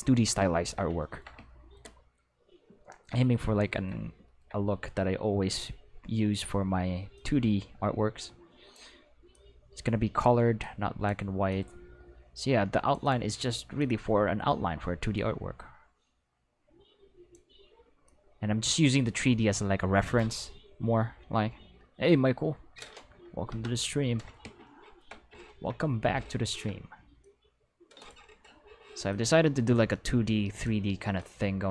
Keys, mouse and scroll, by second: 7.1-8.7 drag, 9.2 click, 10.5 click, 11.4-12.8 drag, 13.0 click, 13.7-17.2 drag, 18.0-20.1 drag, 23.4 Return, 27.1 click, 28.2 Escape, 29.0-30.6 drag, 31.1 click.